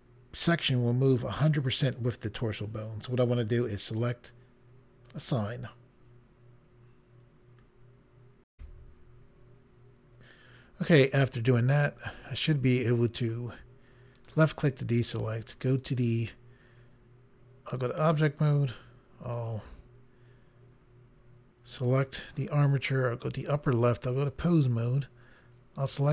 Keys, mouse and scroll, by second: 5.1 click, 9.8 Pause, 14.2 click, 15.7 click, 17.7 click, 21.7 click, 23.4 click, 24.3 click, 25.8 click.